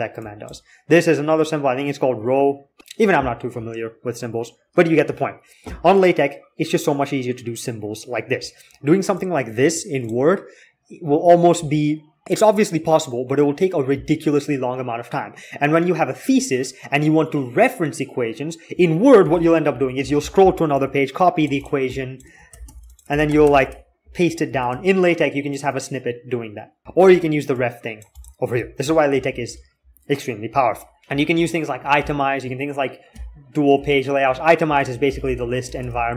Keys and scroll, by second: 19.1 alt+x, 22.3 ctrl+c, 22.4 ctrl+c, 22.9 ctrl+v, 23.0 ctrl+v, 23.2 ctrl+v, 23.4 ctrl+v, 24.4 alt+Tab, 31.0 alt+4, 31.8-36.1 typing.